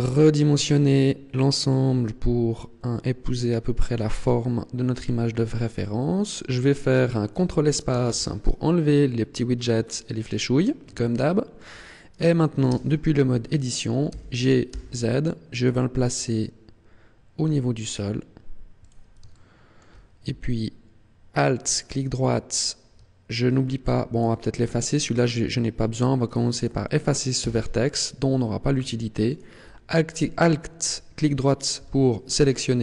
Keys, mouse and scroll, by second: 5.1 click, 5.8 shift+middle click, 6.7 scroll up 2, 8.0 ctrl+space, 9.8 scroll up 2, 11.1 shift+middle click, 12.7 Tab, 14.1 g, 18.9 click, 19.3 shift+middle click, 21.7 alt+right click, 22.2 middle click, 24.1 right click, 26.2 right click, 26.5 right click, 27.3 x, 29.2 alt+right click, 31.8 KP_1.